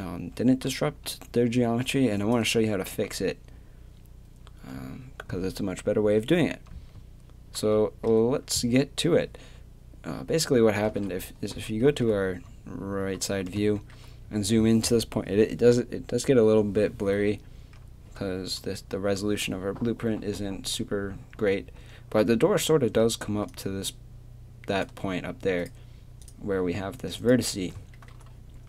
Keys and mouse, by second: 7.8 middle click, 11.0 KP_3, 18.6 middle click, 18.7-21.5 middle drag, 23.3-25.6 drag, 23.3 d, 27.9 middle click, 28.1 click, 28.1 right click, 28.3 middle click.